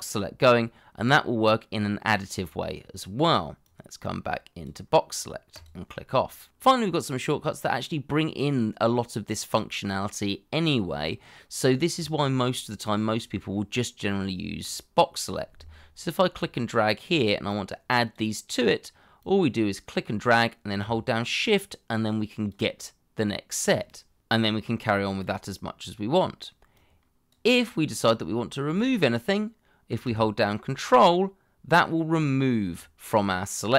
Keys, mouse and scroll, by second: 7.9 middle click, 8.9 shift+middle click, 10.2-11.3 scroll up 1, 21.4 shift+click, 24.3 shift+click, 26.7 shift+click, 30.8 ctrl+click.